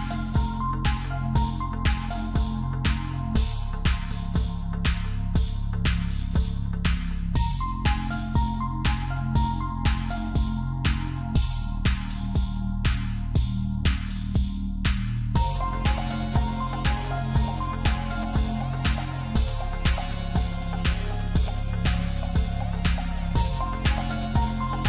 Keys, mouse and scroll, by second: 0.5 KP_1, 1.7-2.6 scroll down 5, 2.6 shift+middle click, 3.4-4.3 scroll up 1, 4.3 g, 11.4 g, 14.7-15.2 scroll down 2, 15.2-17.0 shift+middle drag, 17.0-17.9 scroll up 3, 17.9 click, 19.6 g, 24.3 ctrl+z.